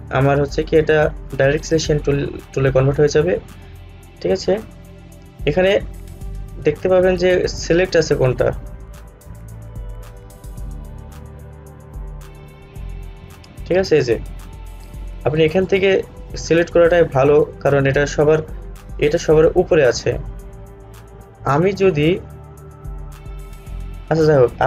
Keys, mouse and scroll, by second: 5.3-5.8 scroll up 1, 7.8 click, 16.6 click.